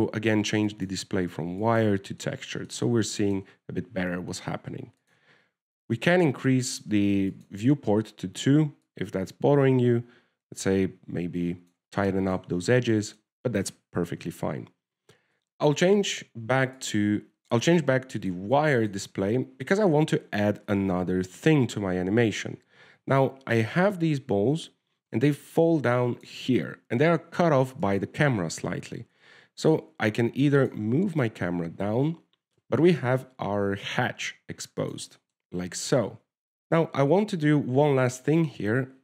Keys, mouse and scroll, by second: 1.9 click, 3.5 middle click, 4.0 shift+middle click, 4.8 scroll up 2, 6.3 click, 8.6 click, 10.2 click, 13.3 middle click, 13.9-14.3 scroll down 5, 14.3 shift+middle click, 15.4 click, 15.4-16.0 scroll up 4, 16.2 click, 16.5 w, 17.0 click, 18.1 click, 18.9 click, 20.0 shift+middle click, 22.0 alt+a, 24.3 alt+a, 25.4 click, 29.1 right click, 30.2 g, 31.9 click, 32.5 g, 36.4 shift+middle click, 36.6 alt+a, 36.7 alt+a, 37.1 click.